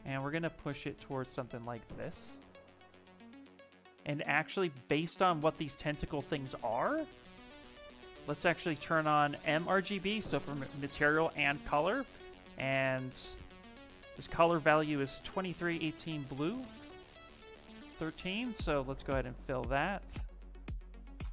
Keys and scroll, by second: 5.2 shift+f, 5.6 shift+f, 8.0 space, 20.8 space.